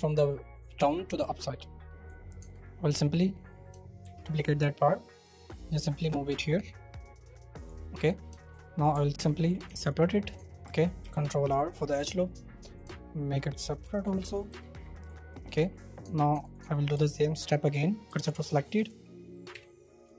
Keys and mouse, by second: 2.4 Tab, 4.0 shift+d, 4.3 middle click, 5.3-6.4 middle drag, 8.0 middle click, 8.7 middle click, 9.1-10.6 middle drag, 9.6 Tab, 10.3 Tab, 11.0 ctrl+r, 11.6 middle click, 12.0 3, 12.7 shift+middle click, 13.8 o, 14.5 o, 14.7 o, 14.7 p, 15.3 middle click, 15.5 Tab, 16.0 Tab, 16.3 Tab, 16.6 Tab, 16.9 2, 18.1 w, 18.7 Tab, 19.5 y, 19.9 click.